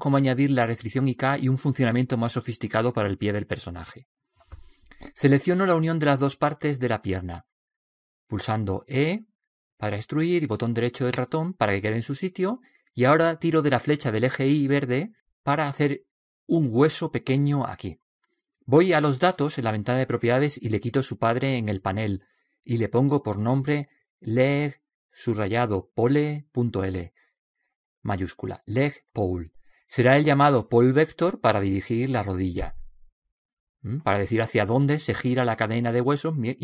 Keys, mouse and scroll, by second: 9.4 e, 12.7 click, 16.1 right click, 23.9 click, 32.1-35.0 middle drag.